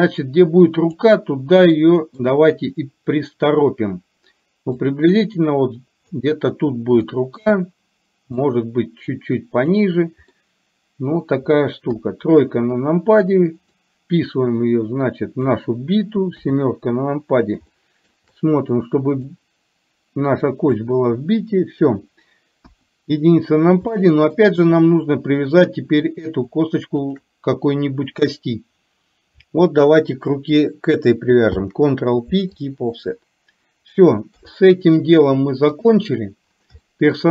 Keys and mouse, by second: 1.9 shift+middle click, 4.8-6.2 drag, 7.2 shift+middle click, 8.6-9.8 drag, 10.4 middle click, 11.9 KP_3, 13.8-15.6 drag, 16.6 KP_7, 17.8 shift+middle click, 19.3-20.9 drag, 22.8 KP_1, 23.9 shift+middle click, 27.2 shift+click, 31.6 ctrl+p, 34.4 KP_3, 36.9 shift+middle click.